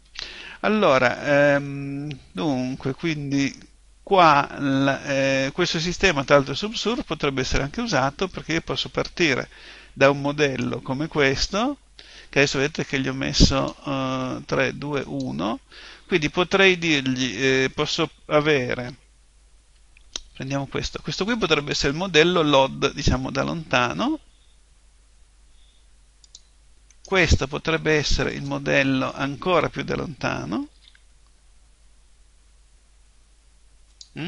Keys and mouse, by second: 0.0 Escape, 1.6-10.4 middle drag, 10.4 right click, 13.5 click, 20.3 shift+d, 21.7-23.6 drag, 26.2-30.3 drag, 26.9 right click, 30.8 shift+d, 34.0-34.2 drag.